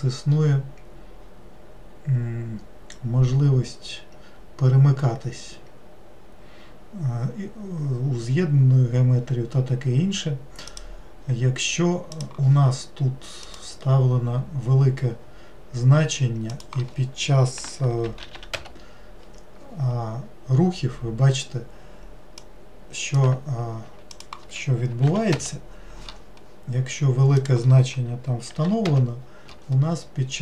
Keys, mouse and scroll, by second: 13.4-18.4 drag, 18.4 0, 22.4-27.2 drag, 27.4-30.4 drag.